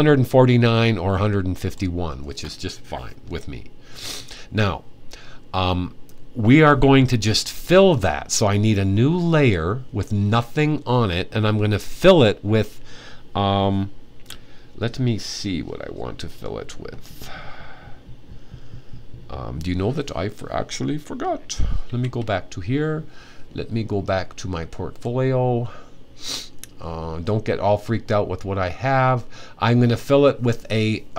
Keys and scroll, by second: 21.6 super+`.